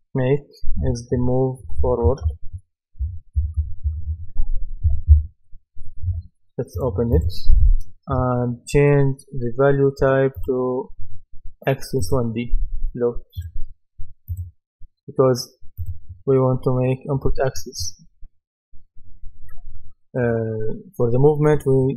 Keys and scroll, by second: 0.8-4.6 typing, 4.9 Return.